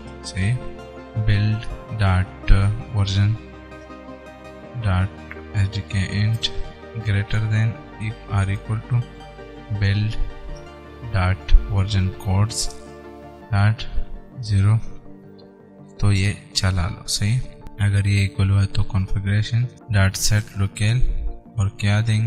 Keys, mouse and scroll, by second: 0.0-2.2 typing, 0.6 Return, 3.8 Down, 4.2 Return, 4.8 ., 5.8 Return, 6.5 space, 7.3 shift+., 8.5 =, 8.7 space, 9.8 shift+u, 10.1 i, 10.9 Return, 11.3 ., 12.5 Down, 12.9 Return, 13.6 ., 14.7 Return, 15.2 Right, 16.2 shift+[, 16.4 Return, 18.8-21.2 typing.